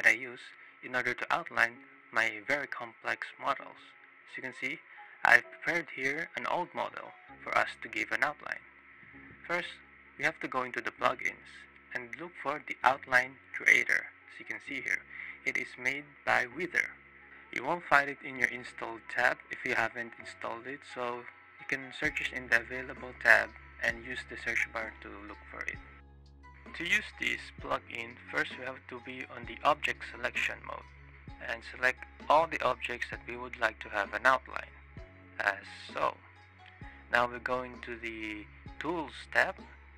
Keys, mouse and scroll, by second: 0.9-1.4 drag, 1.5 click, 2.6 click, 3.0-3.4 drag, 3.9 click, 4.4 click, 4.9-5.6 drag, 5.7 click, 6.2 click, 6.8 click, 8.3 click, 10.3 click, 12.7-13.2 drag, 13.4-14.4 drag, 25.5 click, 26.3-26.6 drag, 26.8-27.2 drag, 27.3 click, 27.7 click, 31.3-34.2 ctrl+drag, 34.7 click, 39.0 click.